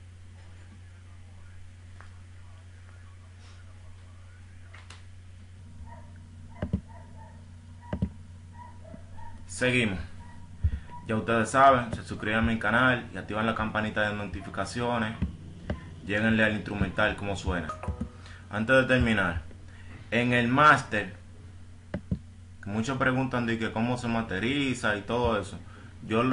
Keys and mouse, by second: 14.3 F1, 14.3 click, 22.9-24.3 right drag, 24.4 right drag, 25.7-26.3 right drag.